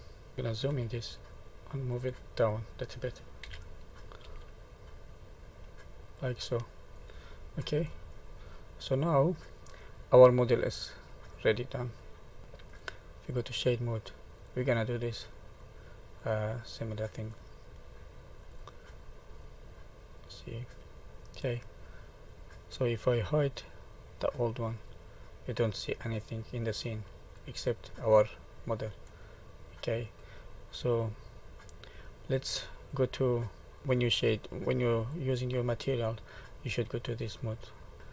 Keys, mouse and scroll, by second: 0.7 KP_Decimal, 1.3 middle click, 2.1-2.7 scroll down 2, 4.2 g, 6.6 middle click, 7.1-8.7 scroll down 18, 8.6 middle click, 10.7 middle click, 12.4 shift+middle click, 13.3 click, 14.4 middle click, 14.4 middle click, 15.6 middle click, 18.5 click, 19.4 middle click, 24.8 click, 25.6 middle click, 27.6 click, 29.1 middle click, 31.7 click, 33.8 click, 35.0 click, 36.1 middle click.